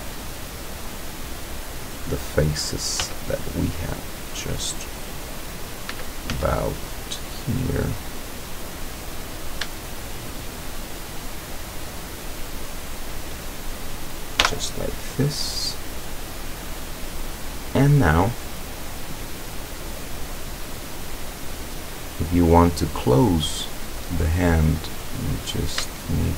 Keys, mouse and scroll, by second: 0.6 click, 2.1 middle click, 3.0 z, 3.5 middle click, 4.3 click, 5.2 click, 5.9 z, 6.8-8.1 drag, 8.1-9.2 scroll up 1, 9.2 right click, 9.4-10.3 scroll up 1, 10.3 shift+right click, 10.6-11.8 shift+scroll up 1, 11.8 shift+right click, 12.1-12.7 shift+scroll up 1, 12.7 shift+right click, 13.0-13.6 shift+scroll up 1, 14.4 f, 15.7 scroll down 1, 18.4-21.7 drag, 22.0 scroll down 1, 23.3 scroll up 2, 23.9 scroll down 2, 25.0 right click.